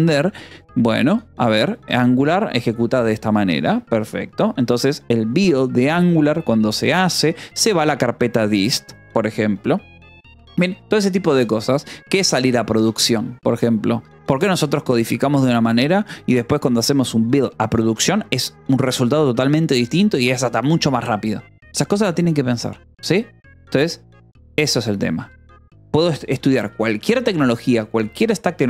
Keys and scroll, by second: 0.2 k, 1.7 o, 3.3 -, 3.7 space.